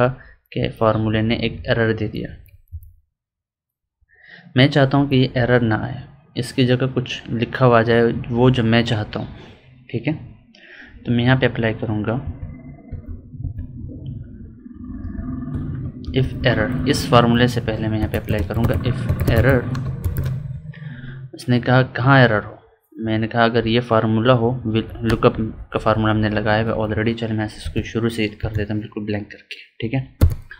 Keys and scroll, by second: 0.5 Up, 1.0 Down, 2.2 Up, 4.8 Up, 5.3 Down, 12.2 Escape, 12.8 F2, 13.3 Escape, 14.9 F2, 16.0 ctrl+Left, 23.5 Right, 27.5 Escape, 28.3 Delete.